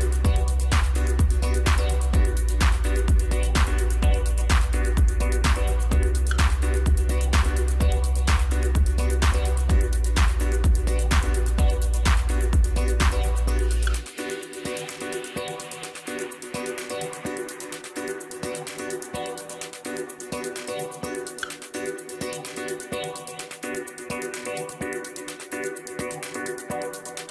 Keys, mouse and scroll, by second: 0.3 click, 0.6 click, 2.2-4.7 drag, 5.0 click, 5.2 click, 6.2-7.7 drag, 7.7-8.4 scroll down 7, 8.4 middle click, 9.0 scroll up 1, 9.8 shift+b, 11.7-13.4 middle drag, 13.4 click, 14.8-16.8 drag, 16.8-17.4 scroll down 1, 17.4-20.2 middle drag, 20.2-20.5 scroll down 3, 20.6-21.8 middle drag, 21.8 click, 21.9 click, 23.1 3, 23.5 click, 23.9 click, 24.0 click, 25.1 2, 26.0 click, 26.1 click.